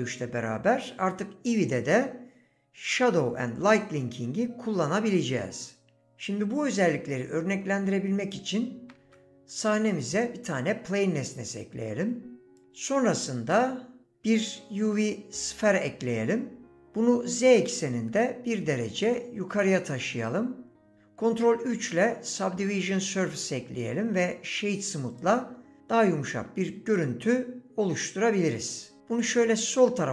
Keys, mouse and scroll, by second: 7.5 x, 9.0 shift+a, 10.7 s, 11.8 click, 12.8 shift+a, 17.3 g, 17.5 z, 18.1 KP_1, 19.0 KP_Enter, 21.5 ctrl+3, 22.9 right click.